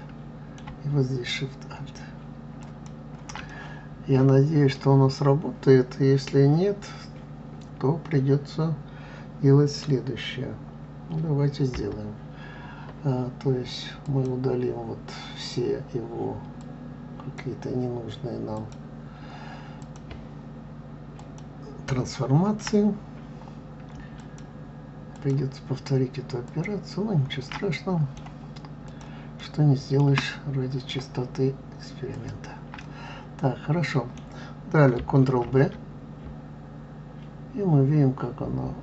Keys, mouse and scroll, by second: 2.6 alt+shift+click, 3.5-6.5 middle drag, 14.0 click, 16.6 click, 18.5-19.9 drag, 21.2 click, 24.2 alt+shift+click, 25.2 alt+shift+click, 26.4 alt+shift+click, 27.5-28.8 middle drag, 28.8 alt+shift+click, 29.4 alt+shift+middle click, 30.3-32.2 middle drag, 32.2 alt+shift+click, 32.8-35.4 middle drag, 35.4 ctrl+b.